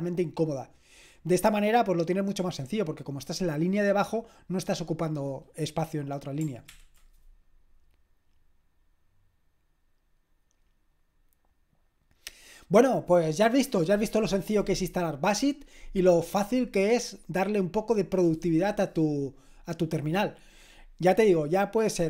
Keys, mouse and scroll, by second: 6.7 ctrl+l, 12.7 click.